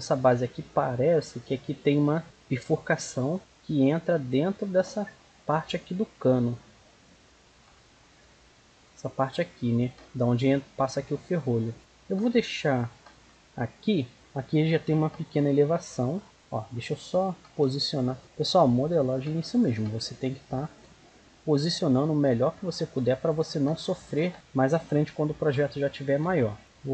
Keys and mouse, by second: 0.7-2.2 right drag, 1.6-2.8 drag, 3.3-7.3 middle drag, 7.9-10.1 middle drag, 10.3-11.8 middle drag, 12.5-14.1 middle drag, 16.2-18.2 right drag, 17.4 g, 19.6-21.2 right drag, 19.7 g, 23.3-25.8 right drag, 26.1 e.